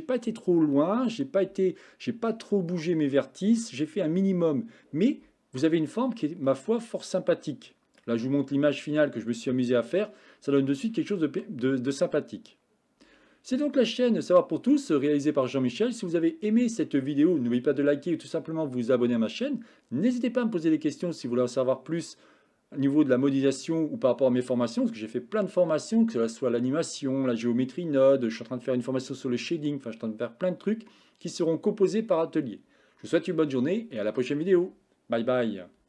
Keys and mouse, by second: 6.7-8.1 middle drag.